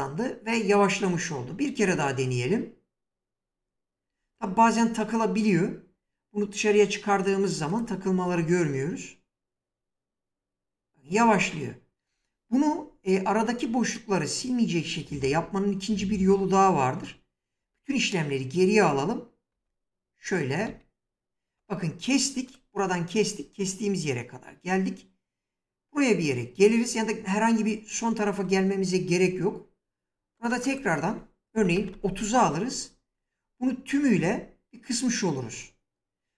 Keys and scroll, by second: 1.7 space, 4.1 space, 8.1 space, 11.1 space, 16.9 ctrl+z, 31.2-32.1 typing.